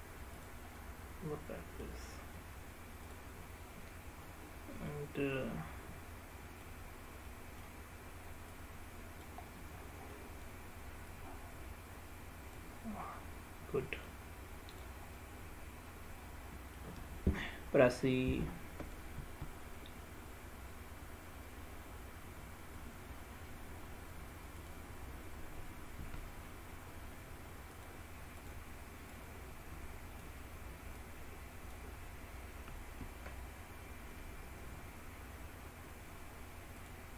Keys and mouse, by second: 0.5 click, 0.9-1.9 middle drag, 4.4 middle click, 5.5-6.7 middle drag, 7.4 middle click, 8.6 click, 9.6 middle click, 11.2-12.6 drag, 13.1-14.2 middle drag, 14.8 click, 15.2-16.9 middle drag, 19.3 e, 24.7 click, 26.1 e, 27.8 click, 27.9 ctrl+a, 28.5 click, 29.3-30.3 drag, 31.2 click, 33.1 ctrl+a, 36.9 click.